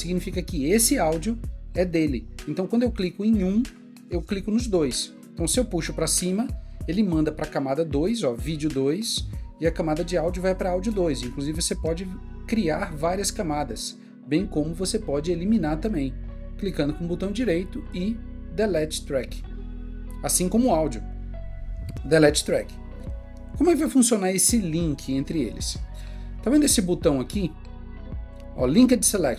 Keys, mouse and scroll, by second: 15.8 click, 16.6 right click, 21.1 right click.